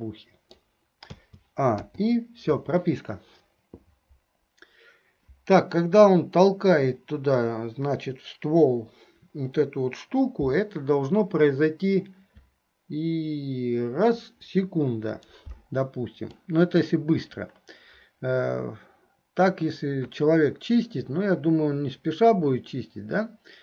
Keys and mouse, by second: 0.1 click, 0.1 right click, 1.4 a, 2.1 i, 16.5 middle click.